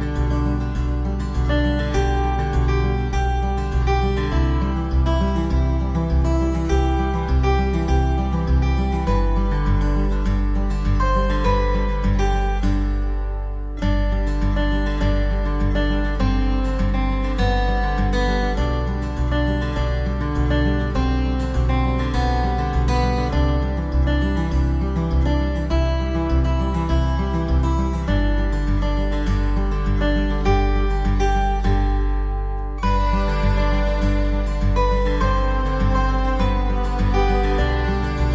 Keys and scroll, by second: 0.0-0.2 typing, 0.7 ctrl+z, 1.5 e, 3.6-5.3 typing, 7.1 ctrl+o, 7.2 ctrl+a, 7.3 ctrl+c, 8.2 ctrl+v, 9.8 ctrl+v, 9.9 ctrl+t, 21.4 ctrl+t, 22.3 ctrl+o, 22.4 ctrl+a, 22.6 ctrl+c, 23.3 ctrl+v, 24.1 ctrl+v, 24.2 ctrl+t, 30.4 v, 32.4 b, 34.3-34.9 typing, 36.0 typing, 36.2 ctrl+z.